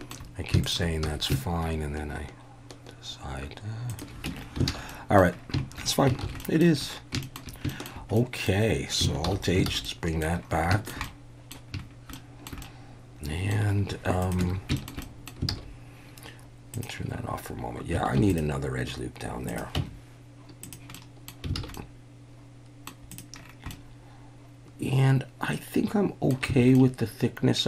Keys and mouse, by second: 0.7 alt+shift+click, 1.0 s, 3.9 shift+click, 4.3 Tab, 4.7 alt+a, 4.9 middle drag, 6.2 ctrl+s, 6.4 drag, 7.2 shift+click, 7.7 shift+drag, 8.2 middle drag, 9.2 alt+h, 9.7 alt+a, 9.8-10.2 middle drag, 10.7 shift+middle drag, 11.0-11.5 middle drag, 12.1-12.5 shift+middle drag, 12.7-13.5 middle drag, 14.2 click, 14.7 shift+Tab, 14.8 shift+middle drag, 15.0 middle click, 15.5 alt+a, 16.7 click, 18.2 ctrl+r, 19.5 click, 19.8 Tab, 20.6 click, 20.9-21.3 middle drag, 21.6 alt+a, 21.8-22.9 middle drag, 23.1 click, 23.7-26.3 middle drag, 26.6 alt+a, 26.8-27.6 middle drag.